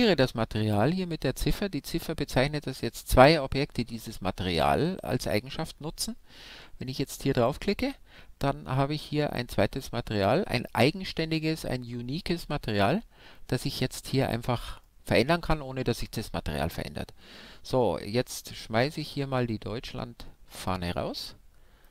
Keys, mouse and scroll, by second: 7.3-11.2 drag, 11.2-12.9 middle drag, 13.2-16.8 middle drag, 20.5-21.9 drag.